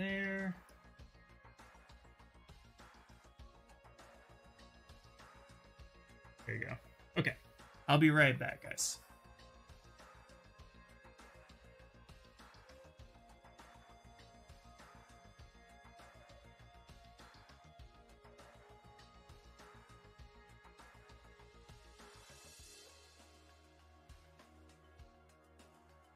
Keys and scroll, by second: 3.5 shift+s, 5.4 shift+s.